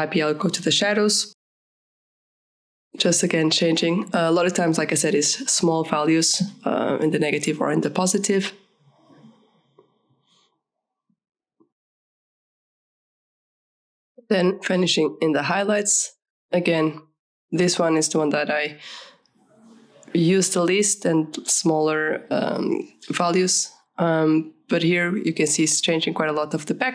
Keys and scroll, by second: 13.3 KP_5, 13.4 Return.